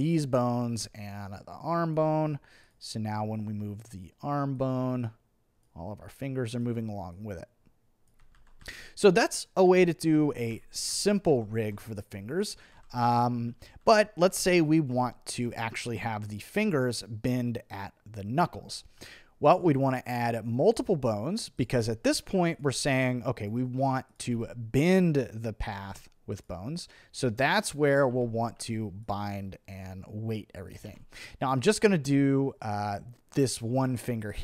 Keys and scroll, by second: 8.3 super+z, 9.7 super+z, 12.7 super+z, 19.0 b, 21.7 t, 22.1 b, 24.3 t, 25.7 b, 28.1 t, 28.6 b, 30.9 t.